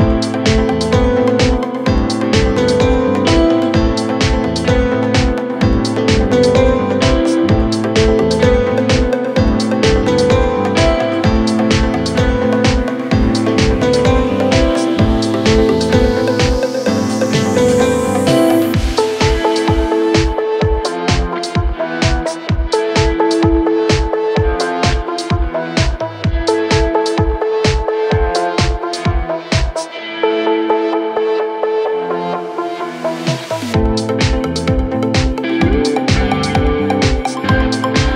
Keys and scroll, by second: 15.0 F3, 29.2 shift+F2, 29.4 Escape, 33.6 Escape.